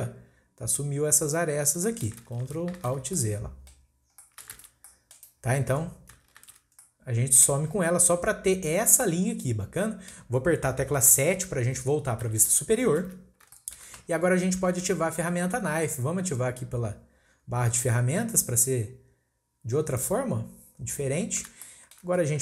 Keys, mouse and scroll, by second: 1.9-2.6 middle drag, 2.6 ctrl+shift+z, 3.1-4.5 middle drag, 4.5 ctrl+z, 4.8-6.4 middle drag, 6.4 ctrl+shift+z, 6.8 middle click, 7.7-9.0 scroll up 1, 9.0-10.1 middle drag, 10.1-11.2 scroll up 1, 11.2-12.2 scroll up 1, 12.2 KP_7, 13.2 scroll down 1, 13.5-16.6 shift+middle drag, 19.8-21.1 drag, 21.1-21.6 scroll up 1, 21.6-22.4 shift+middle drag.